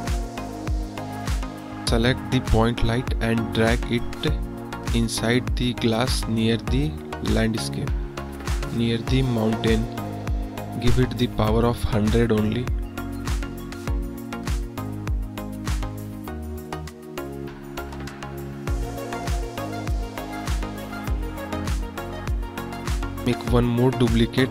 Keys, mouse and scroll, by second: 0.8 click, 3.9 click, 5.0 g, 6.6-7.0 drag, 8.9-9.5 drag, 9.7-10.1 drag, 10.3-10.8 drag, 13.0-13.6 drag, 15.1-16.4 drag, 15.9 KP_0, 17.7-19.1 drag, 22.0-22.6 middle drag, 22.8-23.1 middle drag, 23.9 shift+d.